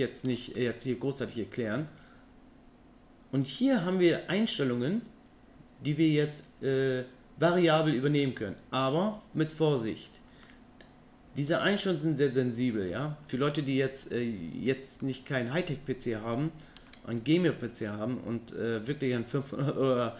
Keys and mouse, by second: 0.6-1.7 middle drag, 15.0 middle click, 16.4-16.9 shift+middle drag, 17.4 middle click, 18.8 middle click.